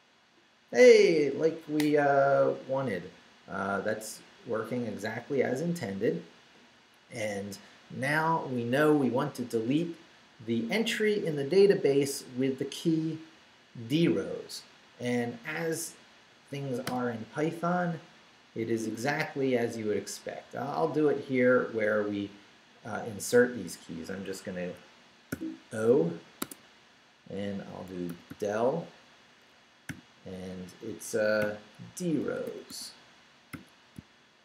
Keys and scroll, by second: 16.9 Return, 17.9 Down, 19.1 Up, 20.3 Up, 24.6 Escape, 25.3 o, 26.4 Tab, 27.6-28.8 typing, 29.9 [, 31.6-34.4 typing.